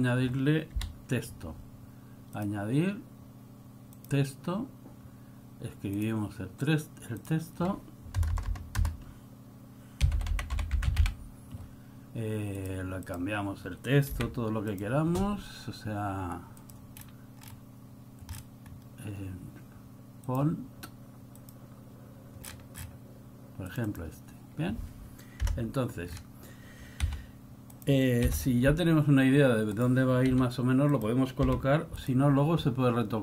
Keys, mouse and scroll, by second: 0.8 click, 2.5 KP_7, 10.1 BackSpace, 10.4 o, 10.7 l, 11.0 m, 17.1 click, 18.8-19.8 scroll down 1, 20.4-21.5 scroll down 6, 21.7 scroll up 1, 26.2 KP_0, 28.4 scroll down 3, 28.5 n.